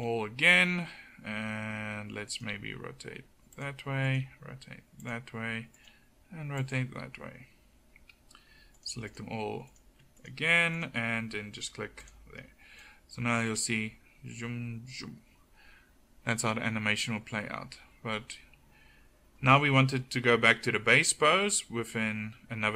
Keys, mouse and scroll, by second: 2.5 r, 4.2 r, 5.9 r.